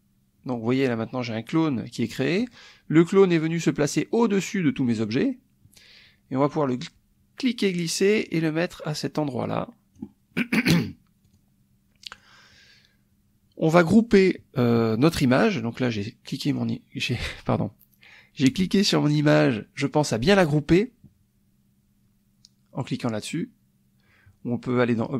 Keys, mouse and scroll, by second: 6.4-10.1 drag, 10.3 middle click, 10.6 click, 11.3 click, 12.1 click, 15.9 click, 16.5 click, 25.0 click.